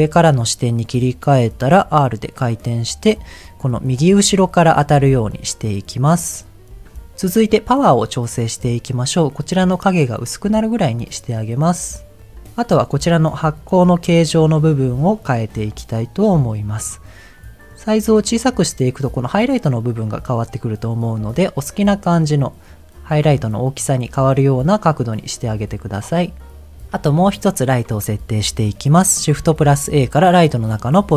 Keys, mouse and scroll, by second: 0.1-1.3 scroll up 3, 3.1 click, 6.1 click, 6.7 ctrl+z, 10.6-12.2 drag, 17.3-18.5 drag, 20.6 click, 23.2-26.7 drag, 26.7 scroll down 2, 27.1 shift+middle click, 29.4 shift+a.